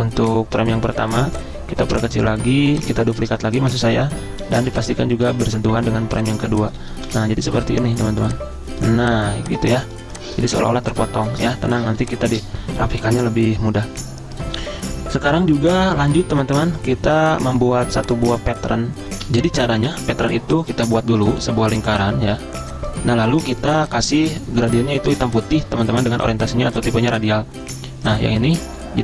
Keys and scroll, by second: 6.1 z, 7.1 v, 9.3 z, 11.5 v, 22.3 v.